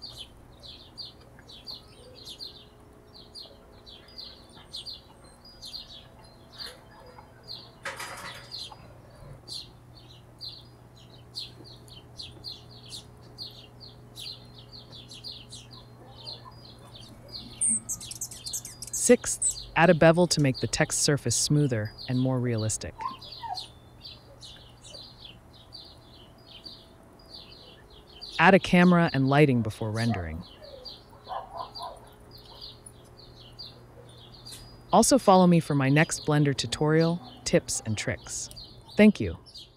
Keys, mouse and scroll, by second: 0.6 click, 1.3 click, 2.5 click, 3.6 click, 4.1 click, 4.4 s, 5.1 click, 5.9 click, 7.3 click, 7.9 s, 8.6 click, 9.2 n, 10.0 space, 11.0 space, 11.5 click, 11.8 Tab, 12.1 a, 12.1 KP_Decimal, 12.6 KP_Decimal, 13.1 click, 13.5 click, 14.1 Delete, 14.3 click, 15.3 alt+shift+click, 15.8 f, 16.2 Tab, 16.4 /, 16.6 space, 18.9-20.4 drag, 20.9 click, 22.3 click, 23.4 click, 24.5 click, 25.3 click, 26.4 click, 28.3 click, 29.3-30.7 drag, 31.0 n, 31.2-32.4 drag, 32.6 g, 32.6 y, 33.5 g, 35.2 y.